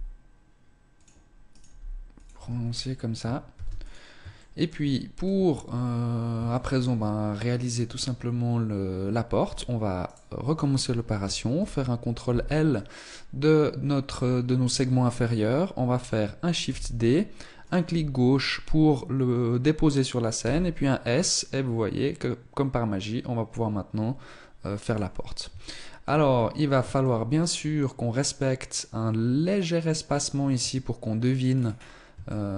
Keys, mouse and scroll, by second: 1.4 right click, 1.5 g, 2.4 Tab, 2.5 scroll down 4, 3.3 ctrl+s, 4.2 shift+middle click, 4.6-5.0 scroll up 2, 5.8 scroll up 1, 6.0 shift+middle click, 7.6 Tab, 10.0 right click, 11.5 ctrl+l, 16.6 shift+d, 20.3 s, 25.6 shift+middle click, 25.8-26.4 scroll up 5, 26.9 shift+middle click, 30.4 Tab, 31.4-31.8 scroll down 6, 32.1 shift+middle click.